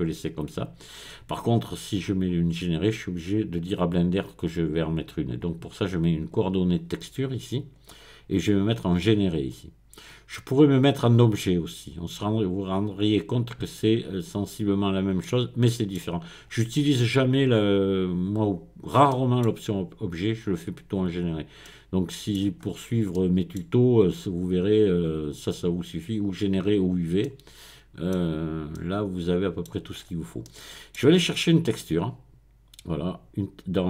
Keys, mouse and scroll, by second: 3.2 click, 6.3 click, 7.6 click, 9.1-11.3 drag, 14.3-14.8 scroll up 1, 14.8-15.2 scroll down 1, 15.2 middle click, 18.6-19.1 scroll up 1, 21.2-21.6 scroll down 2, 22.6-23.1 scroll up 2, 28.2-28.7 scroll down 2, 29.9-30.4 scroll up 2, 31.8 click.